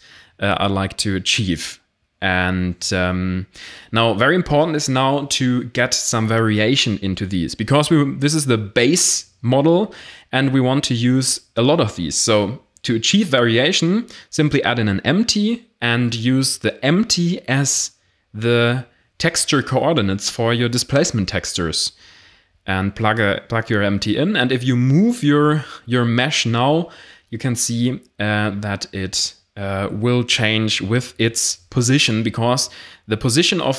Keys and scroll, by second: 0.7 Tab, 8.9 shift+a, 15.5 e, 17.3 z, 17.8 g, 26.0 g, 29.2 g.